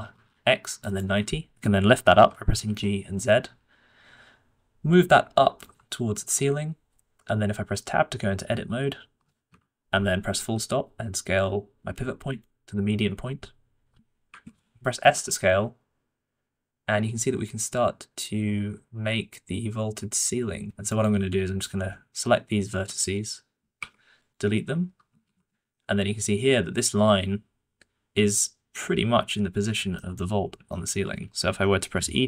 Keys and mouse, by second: 2.1 g, 6.1 Tab, 8.5 s, 10.3 ., 13.2 ., 15.0 s, 22.7 click, 23.7 Delete, 25.2 a, 25.7-26.7 shift+middle drag, 29.9 shift+middle click, 30.6 shift+middle click, 31.5 shift+middle click.